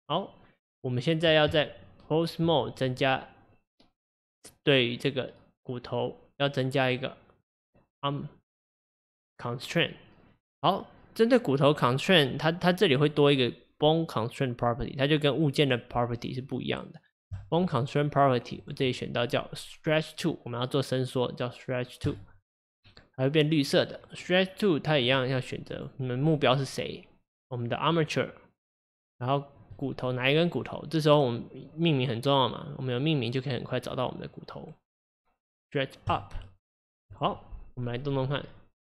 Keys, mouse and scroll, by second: 1.6 Tab, 2.9 click, 17.3 click, 18.6-21.8 drag, 25.0 click, 29.7-32.9 drag, 37.1 click, 38.2 click.